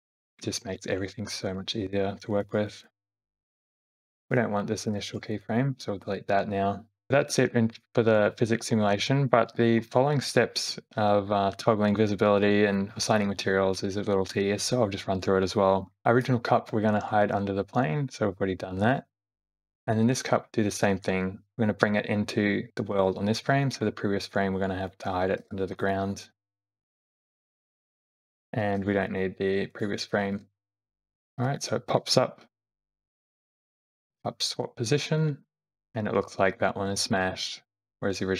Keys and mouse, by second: 2.1 middle click, 2.7 click, 4.2 click, 5.1 x, 7.1 Left, 7.1 Right, 7.1 space, 7.2 Left, 7.4 Left, 7.7 Left, 8.1 Right, 8.3 Right, 8.6 Right, 8.9 Left, 9.5 Left, 9.9 Left, 16.0 Right, 16.0 Left, 16.2 click, 16.7 Right, 17.1 Right, 17.4 Right, 19.1 click, 20.5 Left, 21.5 Left, 21.5 Right, 21.7 Right, 23.4 Left, 24.9 click, 25.5 g, 25.9 middle click, 27.0 g, 29.8 click, 30.3 Delete, 30.6 [, 30.6 x, 30.8 x, 31.4 Right, 31.9 Right, 33.0 Left, 33.7 Right, 34.6 Left, 35.0-35.6 Right, 37.1 shift+middle click, 37.7 shift+middle click.